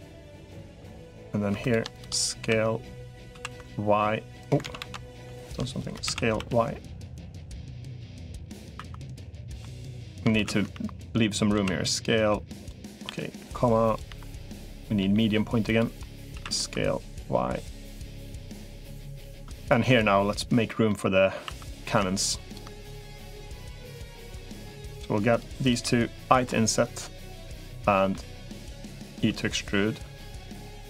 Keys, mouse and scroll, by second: 0.0-3.1 typing, 4.5 ctrl+z, 4.7 ctrl+z, 5.9 s, 8.2 middle click, 8.7 2, 8.9 click, 9.1 middle click, 10.1 s, 12.9 ,, 14.3 ,, 14.9 ,, 15.5 ., 15.8 middle click, 16.1 s, 17.9 middle click, 18.9 3, 19.5 shift+click, 20.7 middle click, 21.3 1, 21.5 click, 23.1 click, 24.1 3, 24.3 click, 25.1 shift+click, 26.3 i, 27.3 middle click, 29.1 e.